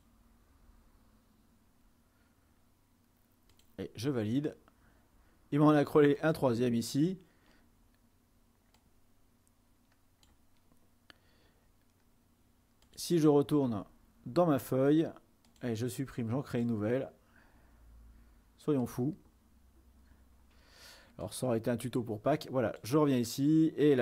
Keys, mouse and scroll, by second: 3.7-4.7 drag, 6.4-7.5 drag, 9.0-11.3 drag, 15.5 click, 16.6 click, 18.9 click, 21.3-23.9 drag.